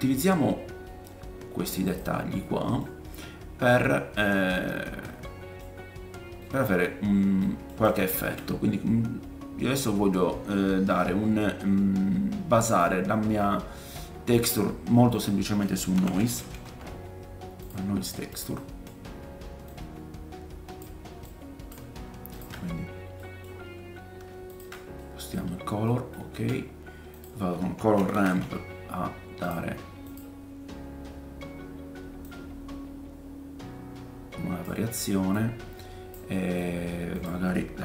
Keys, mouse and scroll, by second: 1.0 middle click, 1.7 scroll up 1, 1.9-7.0 drag, 1.9 middle click, 1.9 right click, 3.1-3.5 scroll up 1, 3.9-4.6 scroll down 2, 4.9 scroll down 1, 5.0 middle click, 6.3 scroll up 1, 7.0-7.4 scroll down 1, 7.8 click, 8.2 shift+a, 17.7-35.5 drag, 18.5 middle click, 18.9-19.5 scroll down 1, 19.7-22.4 middle drag, 19.7-22.4 right drag, 23.2 middle click, 23.5-24.2 scroll up 3, 25.0 middle click, 25.6-25.9 scroll up 2, 26.3 shift+a, 30.6-32.2 scroll up 4, 32.2-35.5 middle drag, 32.2-35.5 right drag, 36.3 middle click, 37.1 click.